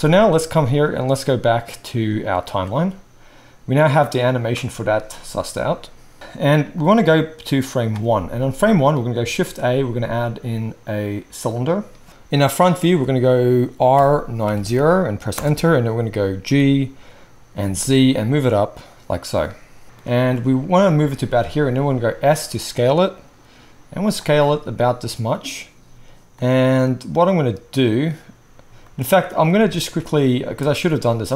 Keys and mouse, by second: 6.2 space, 9.3 shift+a, 13.9 r, 16.4 g, 18.8-31.3 middle drag, 21.7 s, 30.4 shift+a.